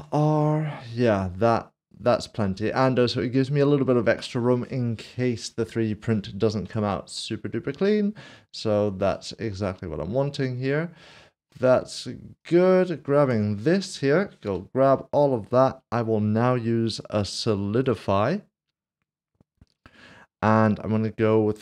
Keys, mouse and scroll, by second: 5.6 right click, 6.7 Tab, 7.2 Tab, 7.5 middle click, 9.0 s, 9.1 shift+middle click, 11.0 scroll down 1, 11.5 middle click, 13.2 Tab, 14.5 a, 17.5 click, 19.8 click.